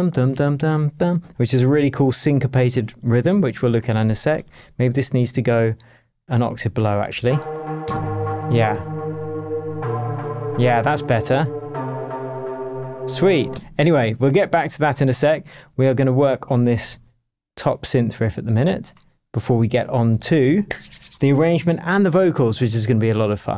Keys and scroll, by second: 1.4 shift+super+j, 4.5 a, 6.0 a, 6.9 super+a, 7.2 shift+super+Down, 7.8 shift+space, 8.3 space, 8.6 shift+Tab, 13.5 space, 20.2 super+l.